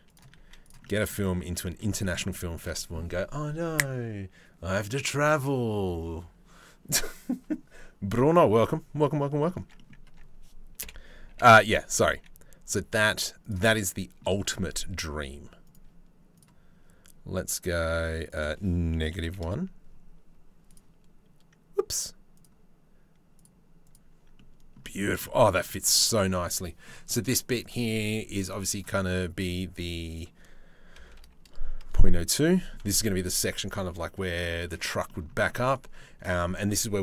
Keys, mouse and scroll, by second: 0.0 z, 0.5 click, 1.0 Tab, 1.3 click, 1.6 shift+middle click, 1.9 middle click, 8.8 middle click, 9.4 middle click, 9.7 Tab, 10.4 KP_7, 10.9 g, 13.8 shift+middle click, 15.3 middle click, 18.0-19.1 middle drag, 20.3 middle click, 22.0 middle click, 23.0 middle click, 23.5 middle click, 24.0 middle click, 24.9 middle click, 25.5 middle click, 27.3-28.4 drag, 29.7-31.4 drag, 32.2 click, 34.4 shift+middle click, 34.7 middle click.